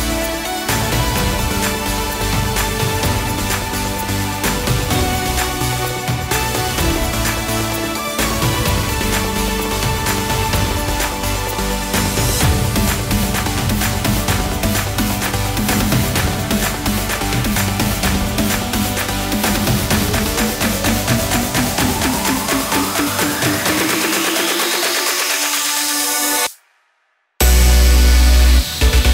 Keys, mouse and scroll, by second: 0.0 middle click, 0.7 scroll up 3, 0.9 shift+a, 1.9 click, 2.7 s, 3.6 click, 4.8 click, 5.6 click, 6.3 click, 7.7 click, 8.9 shift+a, 10.1 click, 11.2 click, 11.5 middle click, 12.5 s, 13.7 click, 14.3 shift+middle click, 15.3 click, 15.5 click, 17.4 click, 18.0 click, 18.8 click, 19.3 click, 19.4 click, 21.1 s, 22.2 click, 22.4 click, 22.7 click, 25.4 click, 25.8 click, 26.6-27.0 scroll up 2, 26.8 shift+middle click, 27.2 click, 27.9 scroll up 3, 28.1 shift+middle click, 28.7 shift+a.